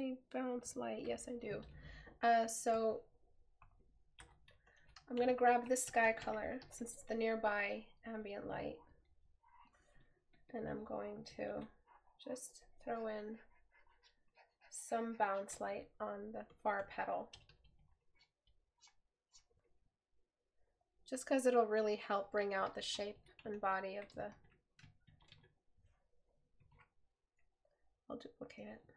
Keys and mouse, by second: 1.7 right click, 4.3 right click, 15.9 right click, 27.8 right click.